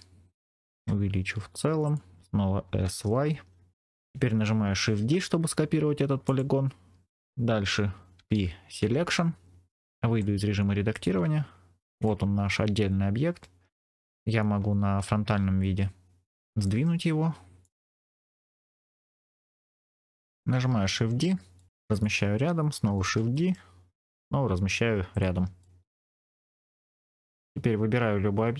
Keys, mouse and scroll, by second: 0.5 click, 0.6 s, 1.7 click, 2.5 s, 3.1 y, 4.9 shift+d, 6.2-8.0 drag, 6.2 right click, 8.1 p, 10.0 Tab, 10.8 click, 12.0-13.3 middle drag, 14.9 KP_3, 15.9-16.2 scroll up 2, 16.5 r, 17.5 click, 17.5 right click, 17.9 g, 17.9 middle click, 19.0 click, 20.1 shift+middle click, 20.6 shift+d, 21.5 middle click, 21.8 click, 22.9 shift+d, 23.3 middle click, 25.0 click, 25.5 middle click, 26.2 scroll down 2, 27.1-28.0 scroll down 1.